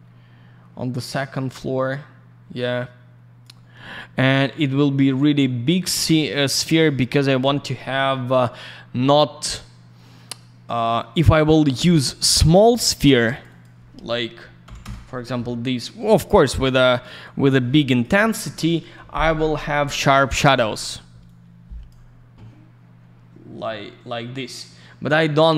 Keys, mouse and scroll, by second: 11.8 click, 11.9 click, 13.3 click, 13.4 click, 13.4 click, 13.6 click, 14.6 s, 14.8 Return, 17.2 click, 21.2 click, 23.5-24.2 scroll up 1, 24.8-25.4 scroll down 1.